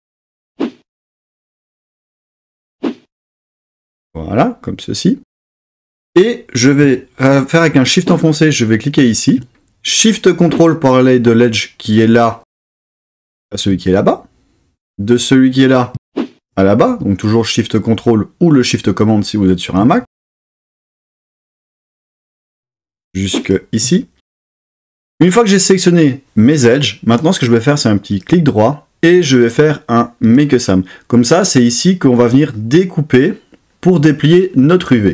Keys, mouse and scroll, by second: 18.5 middle click, 23.4 shift+super+middle click, 28.2-30.3 right drag.